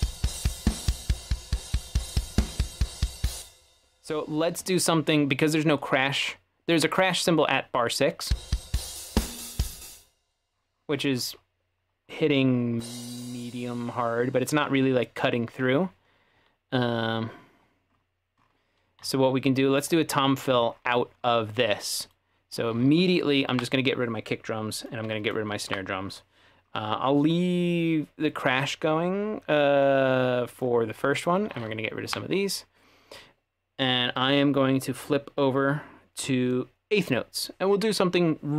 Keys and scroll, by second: 3.4 space, 8.3 space, 9.9 space, 19.8-20.1 typing, 23.6 Delete, 25.7 Delete, 32.1 Delete, 35.1 ctrl+4.